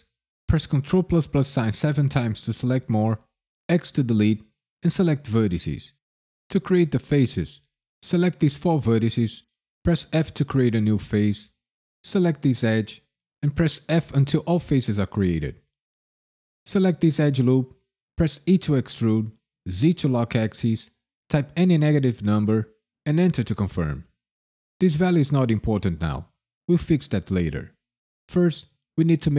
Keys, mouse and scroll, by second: 0.0 ctrl+KP_Add, 0.4 ctrl+KP_Add, 0.6 ctrl+KP_Add, 0.9 ctrl+KP_Add, 1.5 ctrl+KP_Add, 7.1 click, 7.7 shift+click, 8.1 shift+click, 8.6 shift+click, 10.1 f, 11.5 click, 12.6 shift+click, 12.8 shift+click, 13.1-15.1 typing, 16.5 click, 18.4 e, 19.6 z, 21.5 KP_Subtract, 21.9 KP_1, 22.1 KP_0, 23.0 KP_Enter.